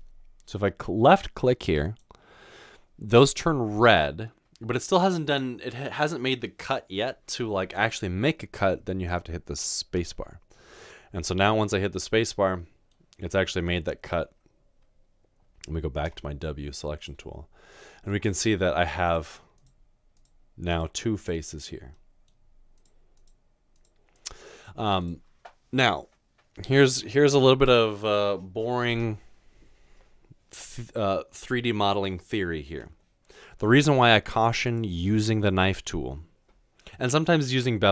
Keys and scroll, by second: 10.0 space, 16.1 w, 18.3 w.